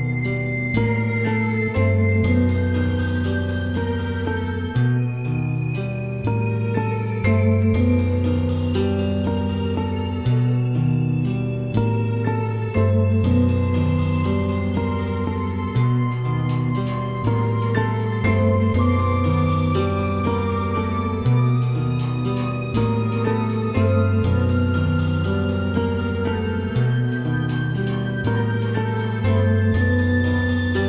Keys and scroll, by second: 2.2 ctrl+d.